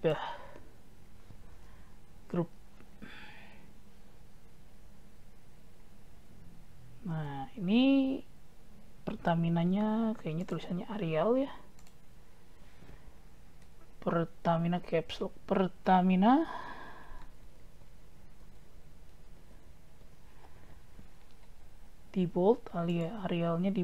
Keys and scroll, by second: 2.2 ctrl+g, 14.6 shift+Caps_Lock.